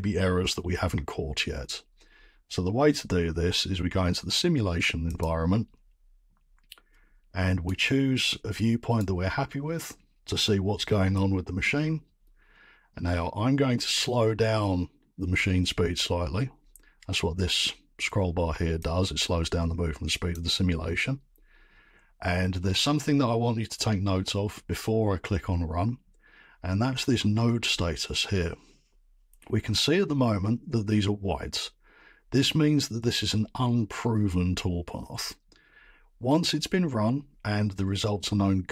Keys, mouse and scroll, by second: 5.2 click, 6.9 scroll, 7.6 scroll, 8.9 right click, 9.6 scroll, 12.6-13.1 scroll, 20.3 click.